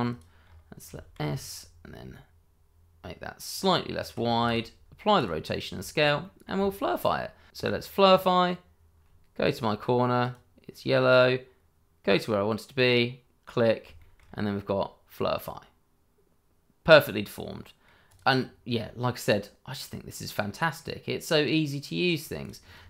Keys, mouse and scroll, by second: 0.1 click, 0.4-0.8 scroll up 1, 0.8 s, 1.1 z, 3.5 click, 4.3 ctrl+a, 5.2 click, 5.9 scroll down 1, 6.2 middle click, 6.6 shift+middle click, 7.5 click, 10.2 click, 12.7 click, 13.9 shift+middle click, 14.2-14.5 scroll up 1, 14.5 middle click, 18.0 click, 18.4 scroll down 1, 18.7 middle click, 22.4 click.